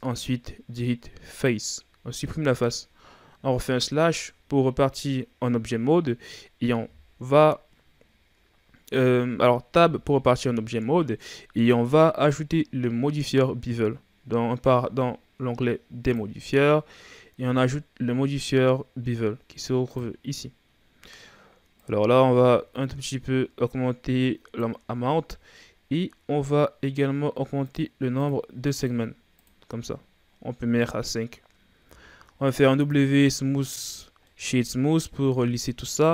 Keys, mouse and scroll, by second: 2.3-3.7 scroll down 3, 3.7 KP_Divide, 9.7 Tab, 21.8-24.8 drag, 27.6-31.9 drag, 31.9 w, 33.9-34.3 scroll down 3, 34.3-35.1 middle drag, 35.1 a, 35.5-36.0 middle drag, 36.0-36.1 scroll up 4.